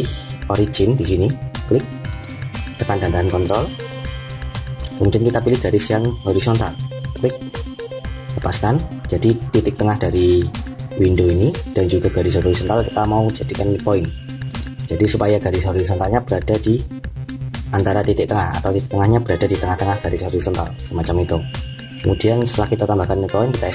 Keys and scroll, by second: 23.6 Escape.